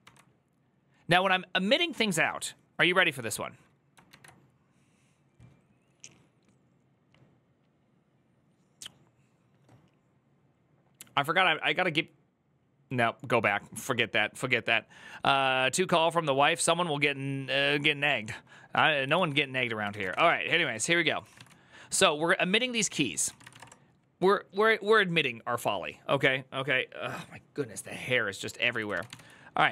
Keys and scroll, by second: 3.9 alt++, 19.0 alt+{, 19.5-23.7 typing, 22.7 ctrl+c, 22.8 ctrl+c, 28.6 ctrl+c, 28.7-29.7 typing.